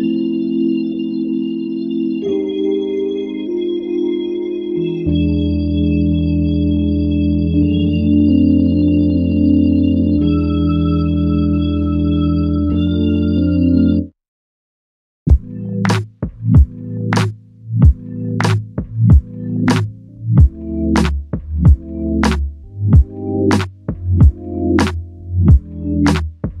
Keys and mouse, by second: 2.5 double click, 6.1 ctrl+click, 8.1 ctrl+click, 10.7 w, 11.8-12.6 typing, 12.4 alt+click, 17.9 ctrl+click, 18.2 ctrl+double click, 19.1 q, 21.4 typing, 22.0 shift+click, 25.4 double click.